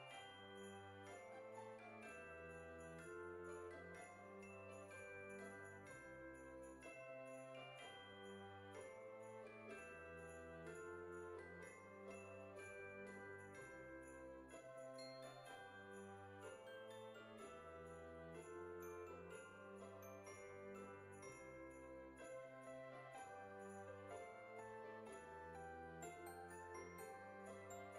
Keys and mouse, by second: 0.4 Return, 4.0 click, 7.7 click, 8.2 KP_2, 8.8 Return, 8.8 KP_Enter, 10.1 middle click, 11.7 middle click, 13.2 click, 13.3 KP_2, 17.6 click, 20.3 click, 21.1 KP_2, 24.9 KP_0.